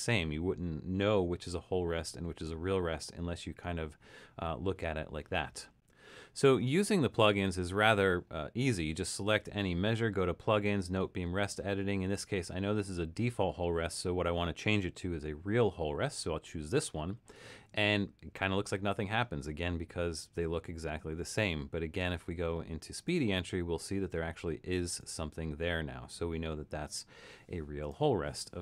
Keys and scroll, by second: 24.0 Left, 27.2 Escape.